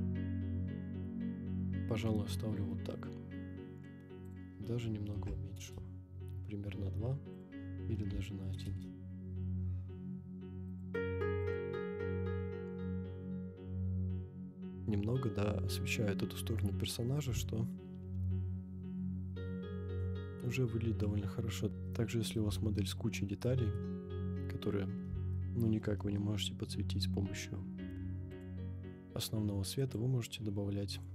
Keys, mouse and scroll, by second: 4.2-5.7 drag, 7.3-8.8 drag, 10.7 click, 11.4 click, 13.7 scroll up 1, 15.0 scroll down 1, 15.8 scroll up 1, 18.6 scroll up 1, 21.8-22.3 shift+middle drag, 22.8-23.7 middle drag, 24.0 scroll up 2, 25.3-25.8 shift+middle drag, 26.1-27.0 middle drag, 28.3 click, 29.8-31.1 drag.